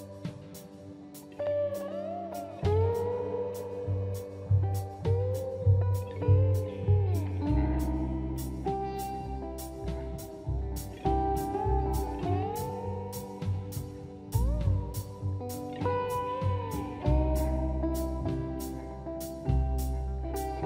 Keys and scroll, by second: 11.5 space.